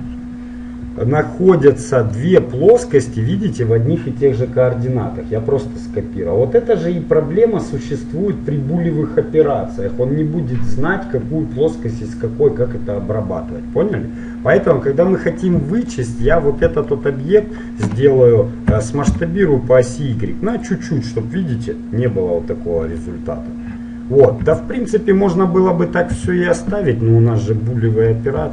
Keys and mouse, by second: 1.1-9.9 middle drag, 16.0-17.2 right drag, 17.0 middle click, 17.2 click, 18.8 s, 21.0 middle click, 22.1 middle click, 24.5 F9.